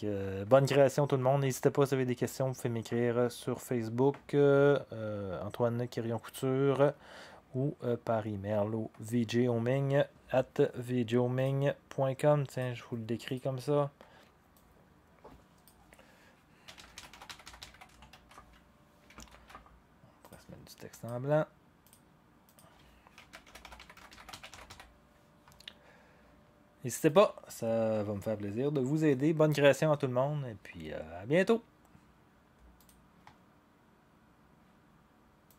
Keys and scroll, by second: 16.4-18.6 typing, 19.3 ctrl+a, 22.9-25.2 typing.